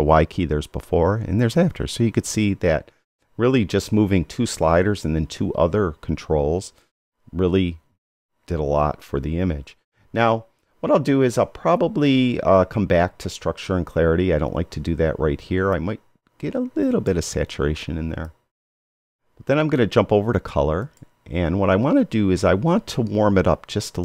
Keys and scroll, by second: 0.8 y.